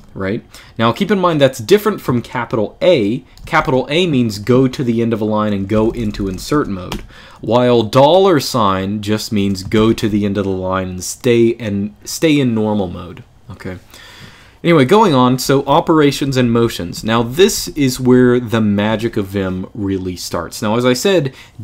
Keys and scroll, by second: 3.2 shift+a, 5.3-6.6 typing, 8.4-9.5 typing, 14.8-18.6 typing.